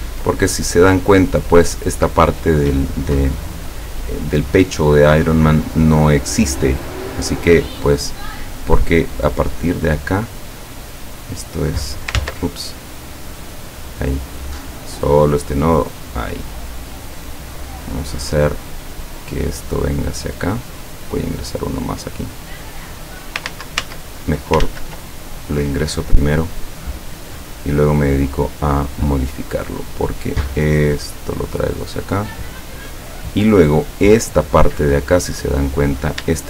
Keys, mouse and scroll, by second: 0.7 ctrl+click, 5.8 click, 10.0 click, 11.2 click, 12.2 ctrl+z, 13.1 click, 13.6 click, 15.0-17.5 drag, 18.6-20.6 drag, 21.1 click, 23.5 ctrl+z, 24.7 ctrl+z, 25.6 click, 26.8-30.1 drag, 30.7-32.9 drag, 35.4 click.